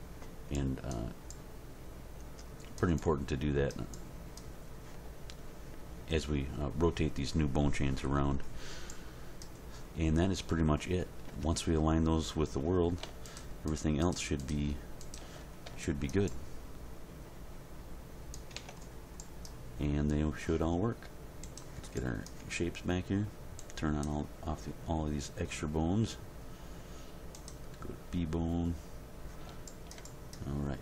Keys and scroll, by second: 11.3 Tab, 18.5 Tab.